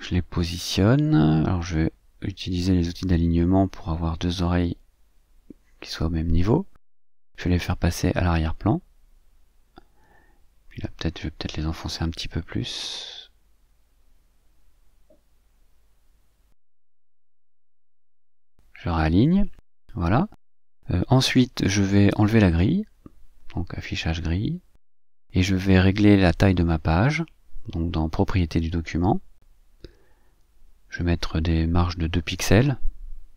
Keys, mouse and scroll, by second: 1.0-2.4 drag, 3.5 click, 4.2 shift+click, 7.2 click, 9.7 click, 11.0 click, 13.1 click, 13.6-15.2 drag, 15.7-18.3 drag, 18.8 shift+click, 20.3 click, 21.0 click, 22.1 ctrl+middle click, 23.3 scroll down 2, 23.8 click, 25.1 click, 26.9 click, 29.3 click, 31.5 click, 32.5 click.